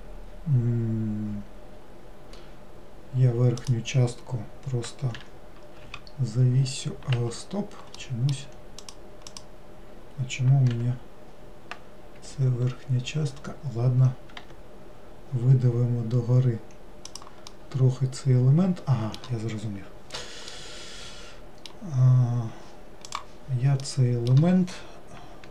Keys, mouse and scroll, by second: 3.7 click, 8.1 middle click, 8.8 click, 9.4 click, 10.8 g, 17.6-23.6 middle drag, 23.8-25.5 middle drag.